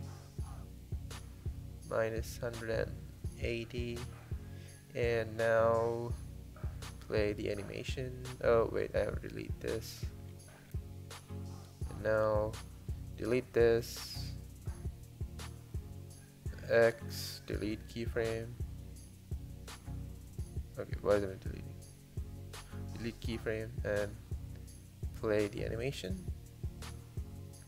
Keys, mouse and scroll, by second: 3.9-7.0 drag, 7.0 space, 9.8 space, 12.9 click, 13.6 click, 15.4 click, 15.7 click, 18.7 click, 23.0 x, 25.0 click, 25.3 space.